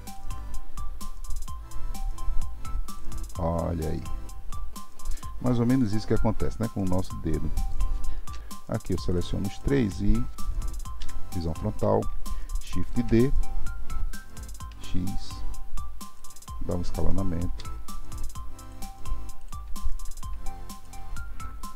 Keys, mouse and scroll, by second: 0.1 click, 0.7 r, 3.4-6.4 middle drag, 6.5-8.3 middle drag, 8.3 KP_3, 9.1 shift+click, 9.5-11.0 shift+drag, 11.0 KP_1, 12.9 shift+d, 19.4-21.7 drag.